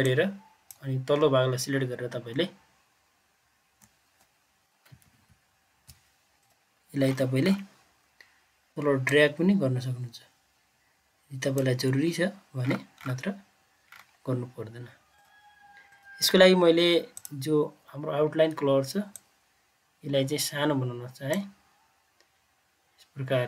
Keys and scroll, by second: 2.3-3.7 Down, 3.9 Down, 5.0 ctrl+z.